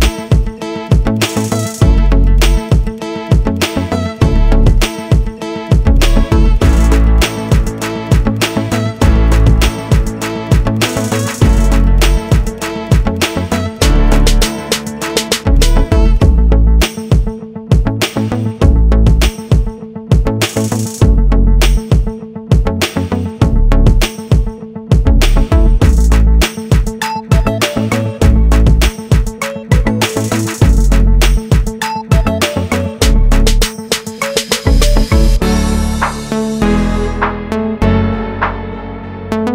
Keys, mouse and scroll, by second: 3.2 double click, 3.8 ctrl+click, 5.9 click, 7.1 click, 11.2 click, 12.9 click, 14.0 click, 16.4 click, 19.1 click, 20.8 click, 22.8 click, 25.1 click, 27.0 click, 28.2 click, 29.8 click, 30.7 click, 35.3 Right, 35.5 Right, 35.7 Right, 37.5 shift+Right.